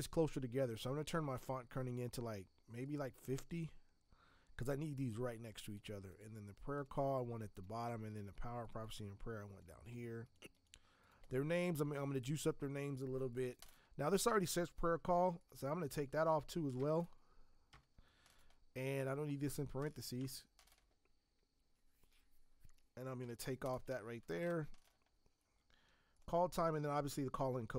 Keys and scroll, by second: 15.2 t, 20.1 BackSpace, 24.4 ctrl+Return.